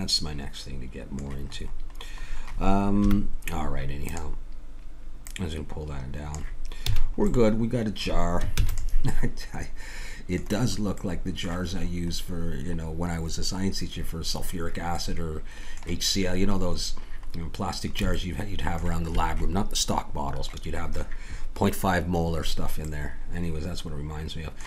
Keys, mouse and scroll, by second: 3.0 KP_1, 4.1-6.5 drag, 6.9 a, 7.3-8.5 middle drag, 8.5 ctrl+s, 23.3-24.6 middle drag.